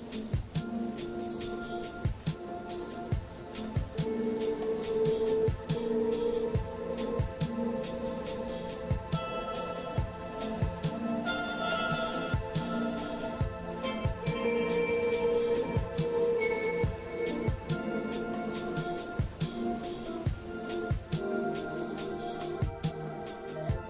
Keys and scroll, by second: 0.4 scroll down 1, 1.3 scroll down 1, 2.3 scroll down 1, 2.5 scroll up 1, 8.5 ctrl+z, 8.9 ctrl+z.